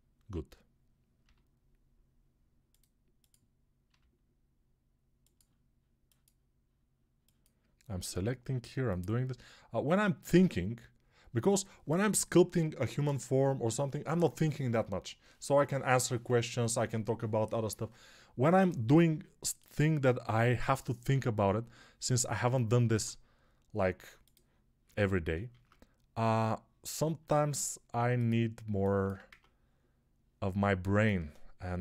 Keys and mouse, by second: 1.1-6.7 middle drag, 1.1 g, 3.7 g, 6.7-11.0 drag, 7.9 g, 11.0-31.8 middle drag, 22.6 ctrl+Tab, 24.9 ctrl+Tab, 25.3 shift+a, 29.1 Tab.